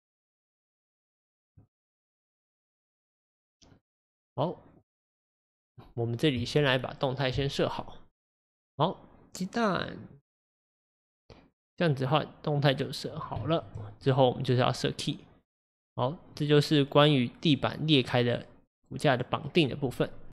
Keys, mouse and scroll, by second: 2.1-2.5 scroll down 2, 2.5-14.4 middle drag, 14.4-16.4 drag, 16.4-20.3 middle drag.